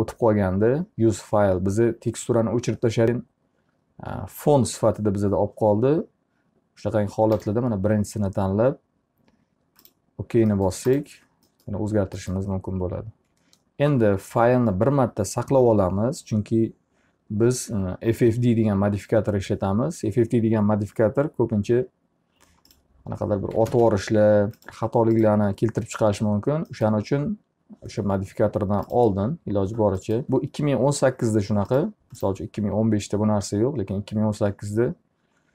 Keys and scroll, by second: 13.9 ctrl+s, 23.8 ctrl+space.